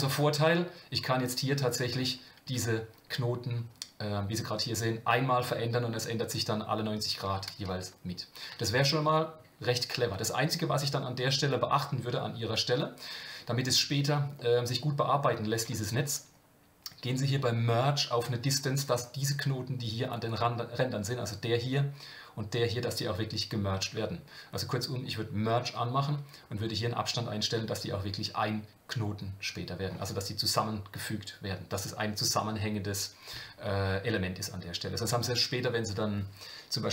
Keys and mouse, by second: 0.3 g, 14.4 middle click, 15.6 Tab.